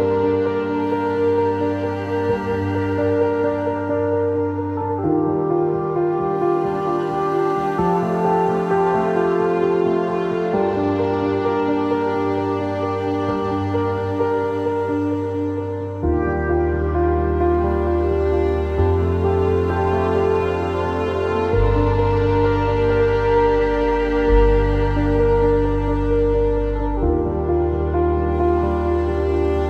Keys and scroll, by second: 5.2 w, 19.7 ctrl+z, 28.9 Escape, 29.3 w.